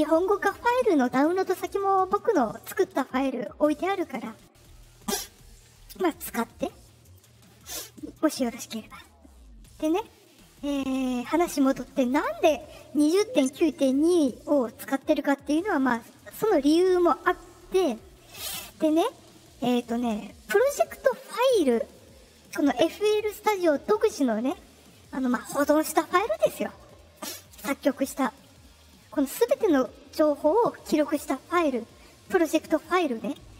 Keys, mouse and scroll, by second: 11.9 click, 13.8 click.